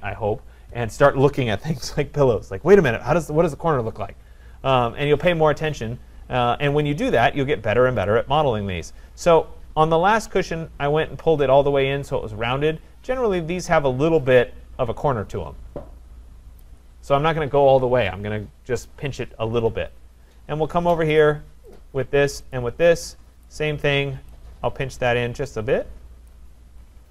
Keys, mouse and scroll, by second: 7.3 click, 10.1-11.2 scroll, 11.2-12.2 scroll, 15.4 scroll, 16.6 click, 19.7-21.2 scroll, 21.2 click, 21.8 click, 22.6 shift+click, 23.0 shift+click, 23.4 click, 26.3 click, 26.7-27.1 scroll.